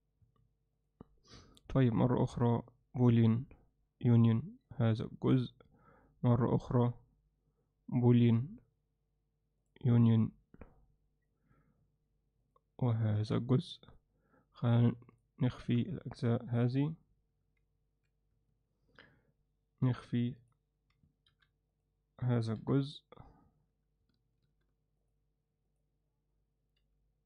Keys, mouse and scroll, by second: 17.6 g, 19.9 h, 20.5 click, 21.3 alt+h, 22.6 h, 24.5 h, 26.9 g.